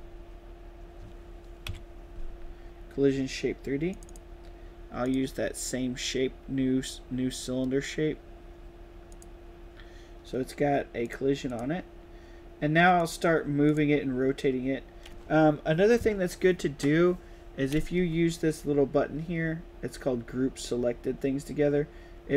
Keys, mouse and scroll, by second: 3.8 click, 4.9 click, 9.0 click, 10.9 click, 11.4 click, 12.9 click, 13.6 click.